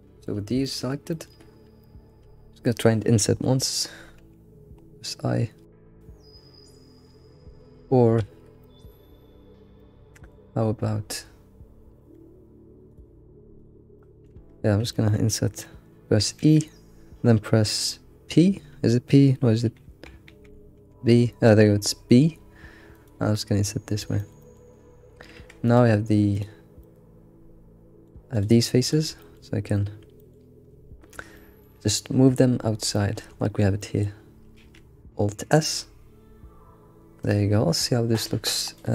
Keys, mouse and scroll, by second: 1.6 scroll up 3, 1.8-4.2 shift+middle drag, 8.2 alt+x, 8.6-11.3 shift+middle drag, 11.3 scroll down 3, 12.0 Tab, 13.0 drag, 13.6 click, 14.0-14.4 middle drag, 14.4 Tab, 14.5 Tab, 14.9-16.4 shift+middle drag, 23.6-24.2 scroll down 1, 24.2 alt+middle click, 24.4 alt+middle click, 25.4 Tab, 25.6 click, 26.3 click, 26.8 scroll down 1, 26.8 middle click, 27.8 middle click, 28.3 ctrl+click, 28.8 ctrl+click, 29.2 alt+middle click, 30.2 alt+middle click, 30.8 scroll up 1, 31.3-32.5 shift+middle drag, 32.5-32.9 scroll down 1, 32.9-34.2 shift+middle drag, 34.2-34.6 scroll up 1, 34.6 alt+s, 38.7 click.